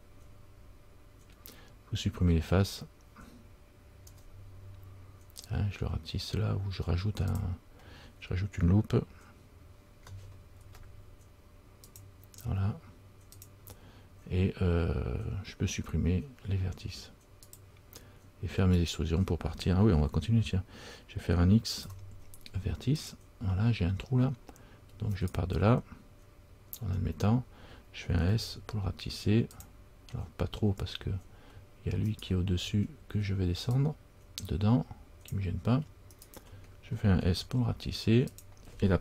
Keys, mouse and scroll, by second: 10.7 ctrl+r, 17.6 click, 18.9 right click, 24.1-25.1 scroll down 2, 25.3 alt+right click, 26.9-27.4 scroll down 1, 27.6 scroll down 2, 28.5 s, 30.6-32.0 scroll up 4, 32.2 alt+right click, 33.9 click, 36.3 alt+right click.